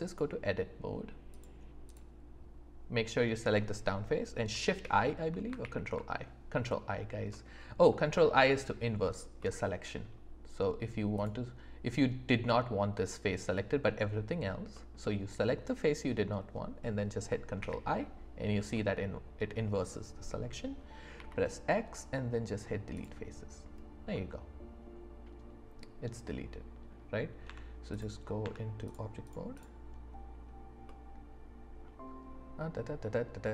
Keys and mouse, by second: 1.8 click, 4.8 shift+i, 5.6 ctrl+i, 7.3 middle click, 9.4 middle click, 11.2 click, 13.5 middle click, 14.7 middle click, 17.6 ctrl+i, 18.7 middle click, 21.1 x, 24.1-26.9 middle drag, 27.4 Tab, 29.5 click, 30.9-33.5 middle drag.